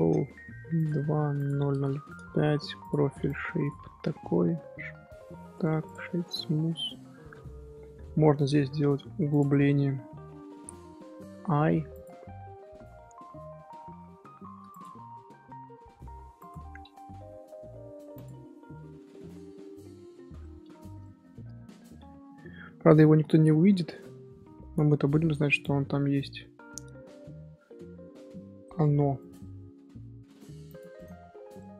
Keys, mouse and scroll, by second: 1.7 KP_0, 2.8-5.2 drag, 5.2 ctrl+2, 6.6-7.7 middle drag, 7.7 scroll up 2, 8.4 Tab, 8.5-8.9 middle drag, 8.9 3, 9.3 click, 19.0 shift+h, 19.3-20.7 middle drag, 20.7 Tab, 21.0 shift+middle click, 21.2 scroll up 1, 21.2 scroll down 1, 21.3 scroll up 1, 22.0-23.4 middle drag, 23.4 ctrl+KP_Add, 26.2 middle click, 26.8 Tab, 27.4 Tab, 29.1 click, 31.5-31.7 middle drag.